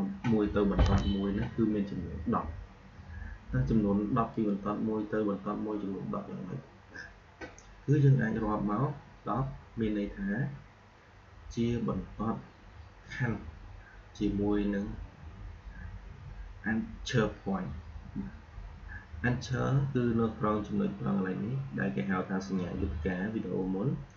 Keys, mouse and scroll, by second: 4.2 click.